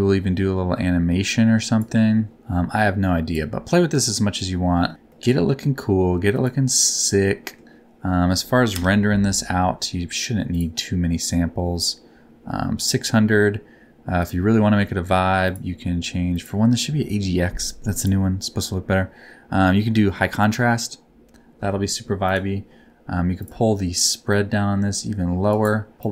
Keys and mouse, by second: 2.3-3.4 ctrl+middle drag, 5.1 click, 5.1 right click, 7.3 click, 7.3 right click, 8.7 KP_0, 14.1 click, 15.4 click, 17.9-20.4 drag, 24.3-25.5 drag, 25.9-26.1 drag.